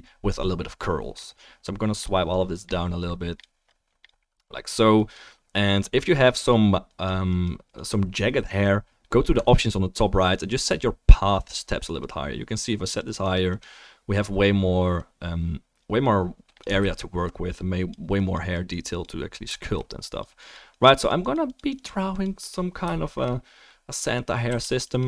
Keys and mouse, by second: 16.8 ctrl+z, 24.4 f, 24.6 click.